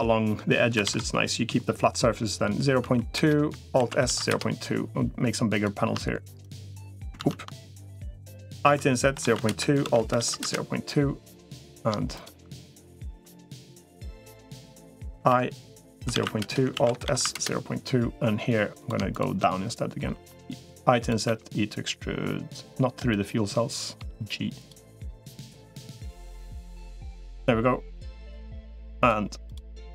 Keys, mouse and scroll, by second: 3.5 alt+s, 5.3 click, 7.1 ctrl+z, 8.5 i, 9.7 alt+s, 14.5-15.7 middle drag, 16.5 alt+s, 19.9 i, 21.1 e, 23.9 g, 25.0 middle click, 25.8 middle click, 28.3 middle click.